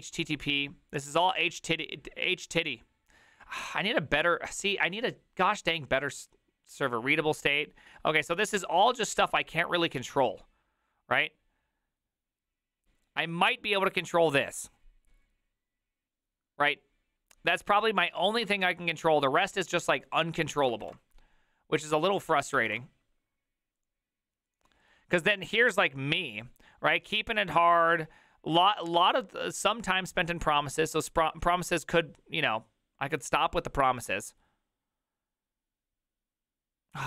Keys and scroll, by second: 18.6 alt+f, 20.9 alt+f, 20.9 alt+d, 21.8 Escape, 22.7 alt+f.